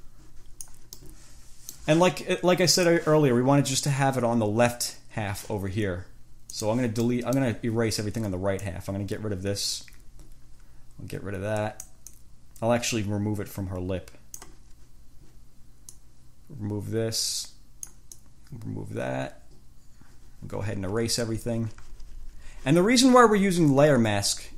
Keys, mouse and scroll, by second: 1.2 click, 1.3 middle click, 2.1 click, 2.9 click, 6.7 click, 7.3 click, 8.9-12.3 drag, 12.4-14.9 drag, 16.2-18.3 drag, 22.9-24.5 drag.